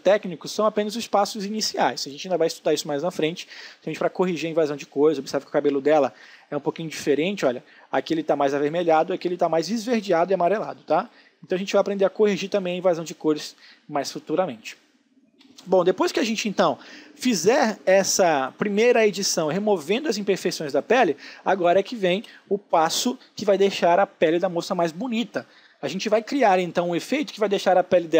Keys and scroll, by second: 15.0 space.